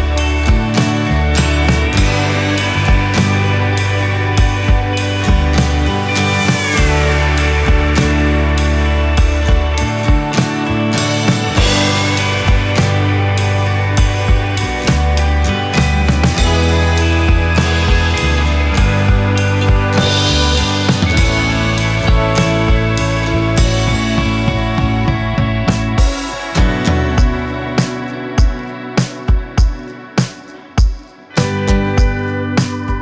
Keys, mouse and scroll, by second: 0.9-2.0 drag, 3.8-4.5 shift+middle drag, 4.5 click, 5.2-9.2 drag, 9.4-10.6 scroll up 11, 9.9 middle click, 11.1 ctrl+s, 12.0 click, 13.9 click, 17.7 click, 18.7-19.8 drag, 25.4-26.0 drag, 27.1 ctrl+s, 30.6-30.9 scroll down 11, 30.8-32.2 middle drag, 32.5 click.